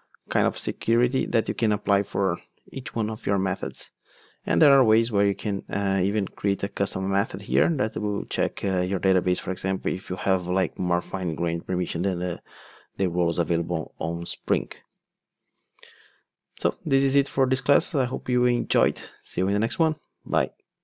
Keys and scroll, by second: 0.0 super+F8, 1.2 ctrl+Tab.